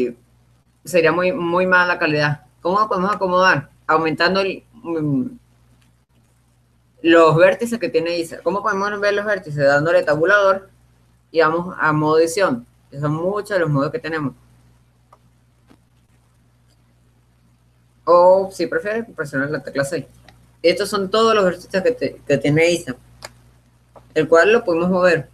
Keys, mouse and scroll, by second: 0.0-1.6 drag, 3.4-7.4 drag, 11.7 Tab, 21.8-25.3 middle drag.